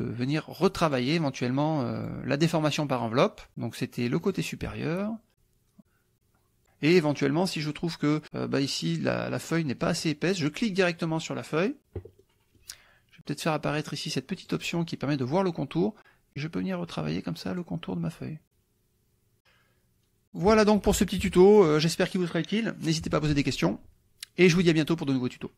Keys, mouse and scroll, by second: 0.0 click, 0.9 click, 2.1 click, 4.2 click, 5.8 click, 6.1 click, 7.5 middle click, 10.1 click, 12.2 middle click, 14.4 click, 16.4-17.8 drag, 18.4 click, 20.3 click, 21.0 KP_Subtract.